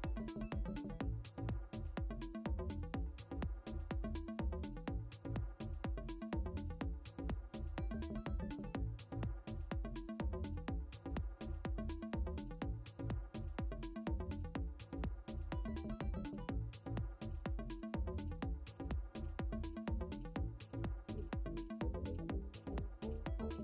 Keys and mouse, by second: 0.2 space, 0.9 click, 1.6 ctrl+z, 2.3 ctrl+z, 3.5 Return, 6.0 ctrl+z, 7.3 click, 9.4 click, 11.3 click, 12.0 ctrl+space, 14.6 click, 15.9 ctrl+alt+i, 17.5 KP_3, 18.2 Tab, 19.2 KP_3, 19.8 Return, 21.0 ctrl+space.